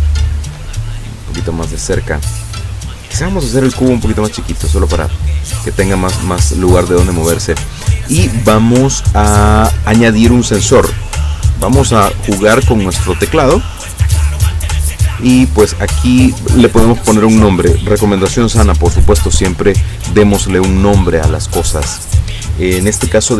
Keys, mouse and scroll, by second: 0.9 shift+scroll up 3, 1.4 scroll down 2, 3.7 s, 4.5 click, 5.4 click, 10.6 click, 13.9 click, 16.0 click.